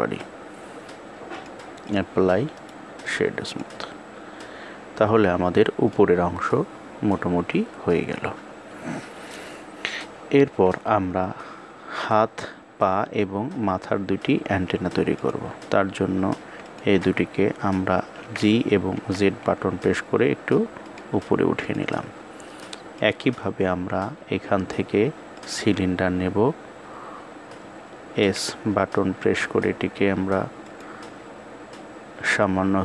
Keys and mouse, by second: 1.1 click, 2.2 right click, 3.1 click, 4.1-5.6 middle drag, 10.1 KP_1, 16.4 shift+click, 21.3 click, 22.8-25.3 drag.